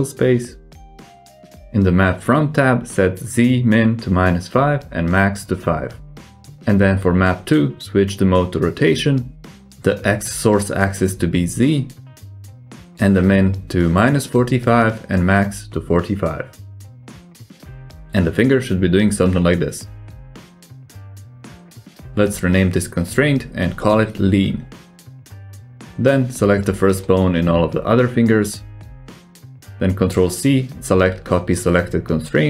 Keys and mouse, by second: 2.2-5.8 drag, 6.5 click, 8.3 click, 10.5-11.7 drag, 13.7-16.6 drag, 17.1 click, 17.5 middle click, 18.0 g, 23.3 click, 24.7-27.0 drag, 28.1 right click, 28.1 middle click, 28.6 shift+middle click, 29.1 shift+middle click, 30.0 shift+middle click, 30.5 ctrl+c.